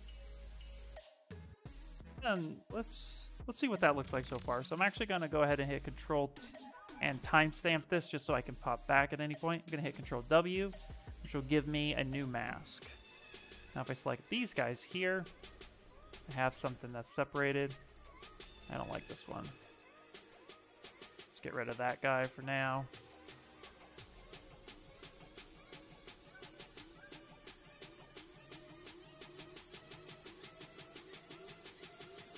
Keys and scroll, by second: 9.8 ctrl+w, 16.3 ctrl+z, 16.9 ctrl+z, 17.3 ctrl+z, 17.6 s, 19.3 ctrl+z, 22.0 s, 24.1 s, 26.5 ctrl+z.